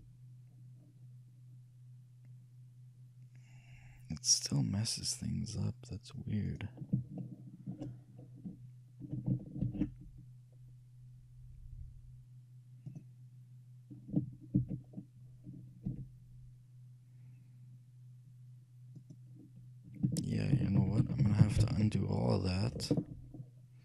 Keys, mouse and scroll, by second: 0.0 g, 7.5-8.9 shift+middle drag, 9.7 ctrl+alt+shift+c, 14.7 ctrl+z, 16.0 g, 20.7 ctrl+z, 20.9 ctrl+z, 21.1 ctrl+z, 21.4 ctrl+z, 21.7 ctrl+z, 21.9 ctrl+z, 22.1 ctrl+z, 23.5 middle click.